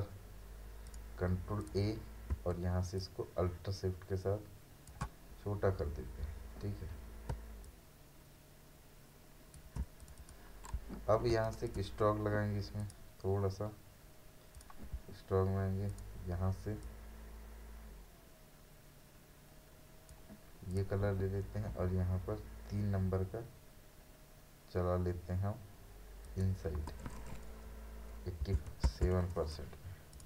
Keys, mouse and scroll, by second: 0.9 click, 3.0-5.4 alt+shift+drag, 5.4 alt+scroll down 1, 7.3-7.6 alt+scroll up 1, 7.6 alt+shift+click, 11.3 space, 11.5 right click, 11.7-20.7 drag, 21.8 scroll down 1, 26.2 click, 28.4 typing, 30.1 click.